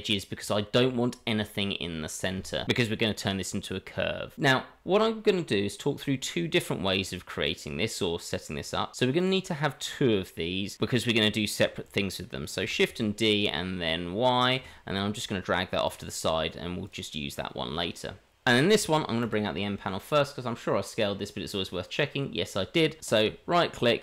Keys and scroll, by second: 0.4 Tab, 19.2 n.